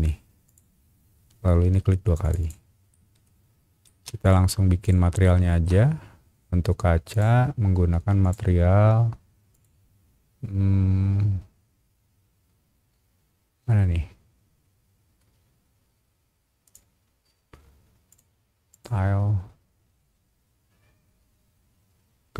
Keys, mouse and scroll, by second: 0.4 click, 2.2 click, 2.4 click, 2.9 middle click, 3.8 space, 4.2 click, 4.8 shift+click, 5.2 shift+middle click, 5.8 scroll down 1, 7.1 click, 8.2 click, 9.5 click, 12.2 scroll down 1, 14.3 scroll down 1, 14.8-15.3 scroll down 2, 15.7 scroll down 1, 16.6 click, 18.1 click, 18.7 click, 19.9 scroll up 1, 20.8 scroll down 1.